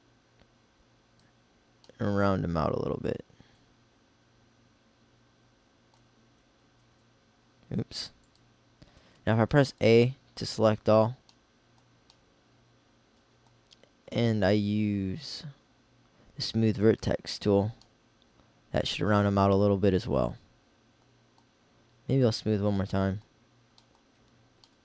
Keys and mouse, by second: 8.3 ctrl+s, 9.1 s, 10.5 a, 10.8 a, 16.6-18.7 middle drag, 22.1-23.8 drag.